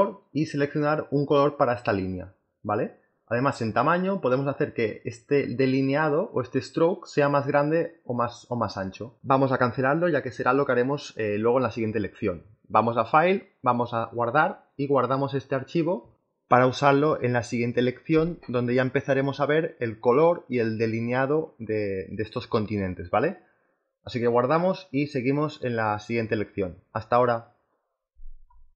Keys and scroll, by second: 16.5 BackSpace, 17.6 3.